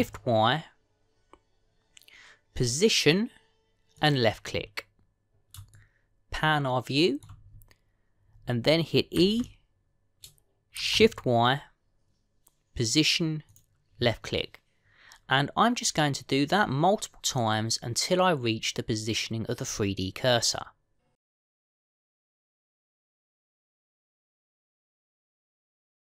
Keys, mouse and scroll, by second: 6.6 shift+middle click, 10.0 e, 14.4 typing, 16.1-17.4 scroll down 2, 21.5-22.7 typing, 25.0 e.